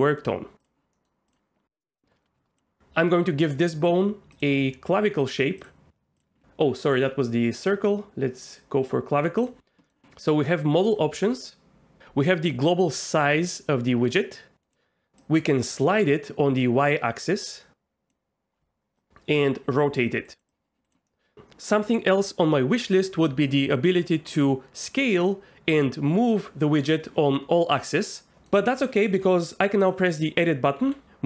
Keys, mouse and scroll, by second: 0.6 click, 0.9 middle click, 2.2 shift+middle click, 4.4-5.7 drag, 7.0-8.7 drag, 9.4 drag, 13.2-14.6 drag, 15.2-16.8 drag, 17.6 click, 19.0 click, 19.8 click, 20.5 click, 21.1 middle click, 28.3 middle click, 29.8 click, 30.8 g, 31.0 r.